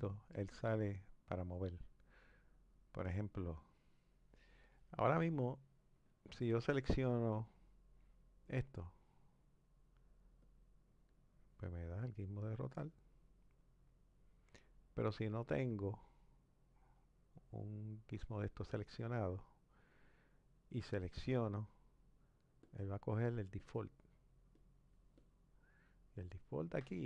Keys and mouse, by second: 3.1 click, 8.7-10.5 drag, 12.3 click, 15.4-17.0 drag, 19.7-21.4 drag, 22.6 click, 23.6 click, 24.5 click, 25.1 click.